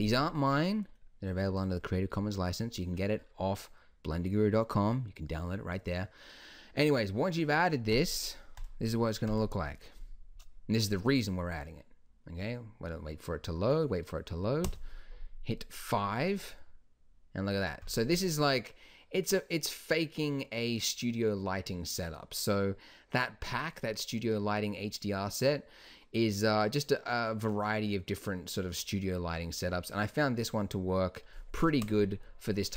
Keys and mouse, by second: 0.2 click, 1.1-6.1 middle drag, 8.7-13.6 drag, 14.8 KP_5, 16.7-17.8 middle drag, 18.2 middle click, 19.1-19.5 middle drag, 19.8-20.4 middle drag, 23.8-24.4 middle drag, 25.0 middle click, 26.1 middle click, 26.9 middle drag, 30.6-31.9 middle drag, 31.9 KP_0.